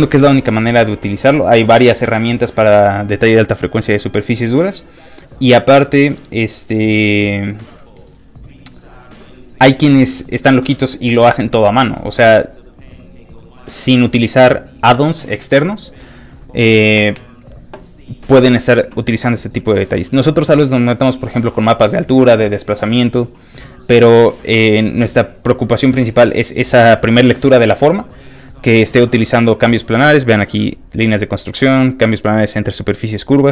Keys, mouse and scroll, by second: 30.2 click, 33.2 click.